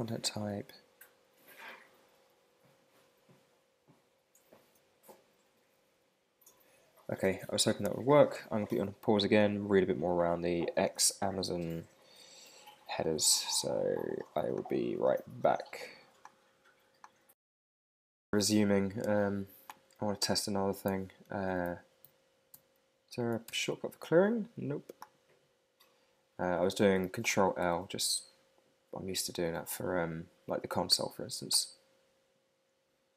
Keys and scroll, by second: 17.4 super+Tab, 20.3 super+`, 27.6 super+Tab.